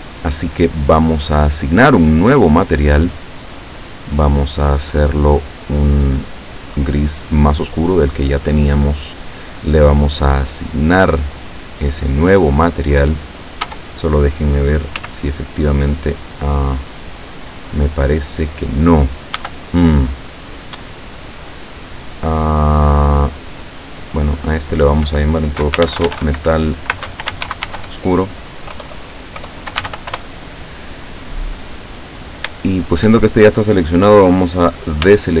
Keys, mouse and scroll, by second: 2.3 click, 4.8 click, 6.6 click, 11.4 click, 13.6 Tab, 15.0 z, 15.6 scroll down 2, 16.4-16.8 scroll down 2, 17.6-18.0 scroll up 2, 18.9 scroll up 2, 19.4 Tab, 21.7-22.0 scroll down 2, 24.7 click, 25.8-29.9 typing, 30.1 Return, 32.5 shift+click, 35.1 a.